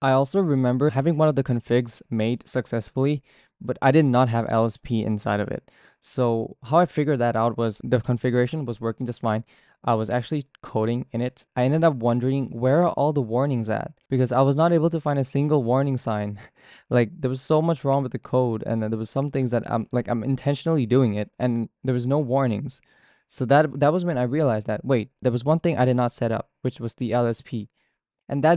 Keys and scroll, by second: 0.0-10.8 typing, 10.7 ctrl+d, 16.8-25.0 typing.